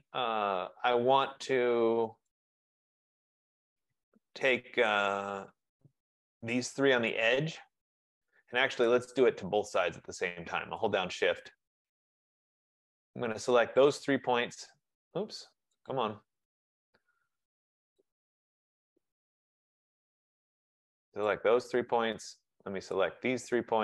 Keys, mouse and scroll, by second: 0.0 click, 2.4 right click, 7.3 shift+click, 9.0 click, 11.1 shift+click, 13.8 click, 16.0 click, 18.1 shift+click, 21.3 click.